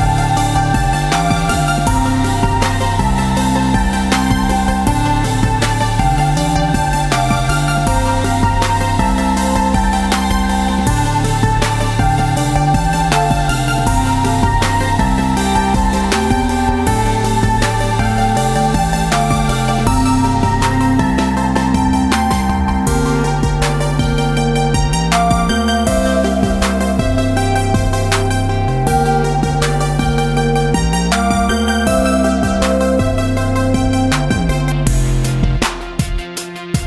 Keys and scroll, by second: 4.4 BackSpace, 33.7 space, 33.9 Tab.